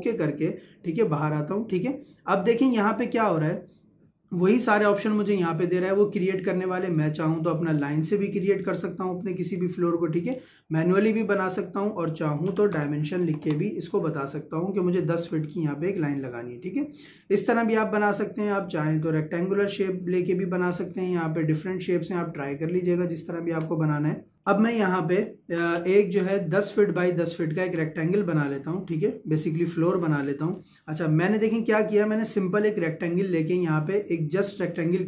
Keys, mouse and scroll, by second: 6.9 click, 10.3-12.2 scroll up 1, 13.2 ', 13.4 Return, 17.0 Escape, 18.0 click, 20.7 Escape, 23.5 Escape, 24.5 click, 25.3 Delete, 26.6 click, 29.9 click, 30.5-31.6 scroll up 1.